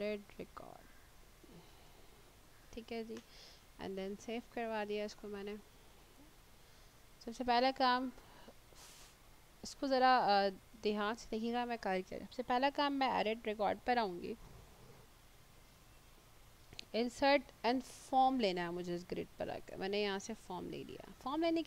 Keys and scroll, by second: 0.0-2.2 typing.